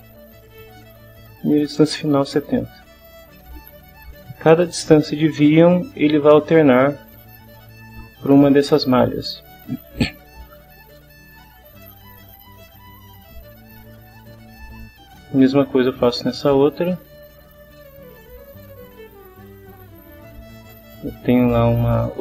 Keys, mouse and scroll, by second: 0.5-1.5 typing, 2.3 click, 13.7 click, 15.1 click, 17.2 click, 18.2 click, 20.1 click, 21.2 click.